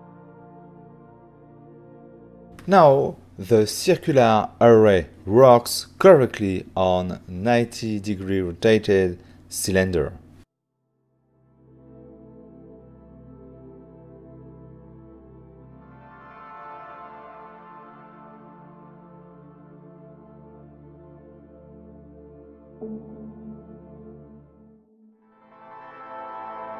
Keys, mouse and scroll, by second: 0.4 click, 0.5 right click, 0.8 double right click, 1.0 ctrl+middle click, 2.4 click, 3.1 click, 4.4 click, 4.9 click, 5.3 c, 5.8 click, 6.5 click, 7.7 click, 8.2 right click, 8.6 click, 8.9 middle click, 10.3 1, 10.8-11.2 scroll up 5, 11.2 f, 11.7 click, 11.9 right click, 12.3 click, 12.8 shift+click, 13.1 shift+click, 13.5 middle click, 13.7 ctrl+middle click, 14.2 middle click, 14.3 shift+middle click, 14.5 middle click, 15.3 click, 16.2 b, 17.8 typing, 19.1 click, 20.0 right click, 20.3 middle click.